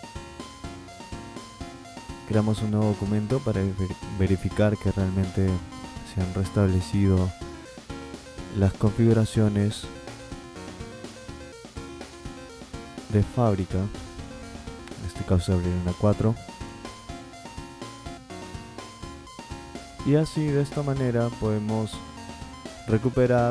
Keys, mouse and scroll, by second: 2.2 click, 5.3 click, 11.5 click, 14.0-16.6 drag.